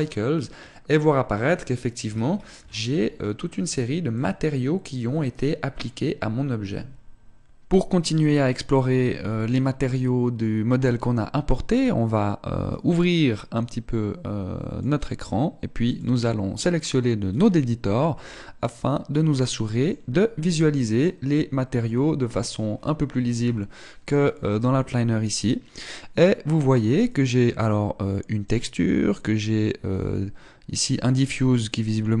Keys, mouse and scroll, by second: 13.1 click.